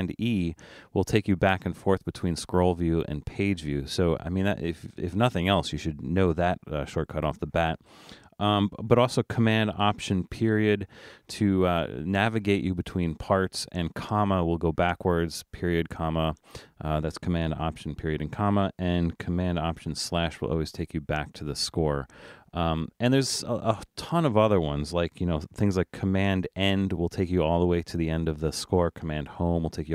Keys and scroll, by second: 1.2 super+e, 10.2 alt+super+., 11.1 alt+super+., 12.3 alt+super+., 13.1 alt+super+,, 14.4 alt+super+,, 15.1 alt+super+., 15.8 alt+super+., 16.2 alt+super+,, 17.8 alt+super+,, 19.8 alt+super+/, 26.3 super+?, 29.1 super+End.